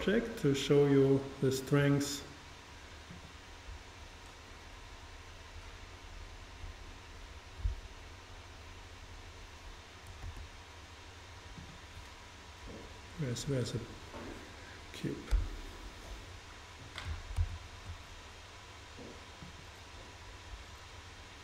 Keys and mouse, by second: 10.3 g, 11.7-13.4 drag, 15.4 KP_7, 17.4 shift+a.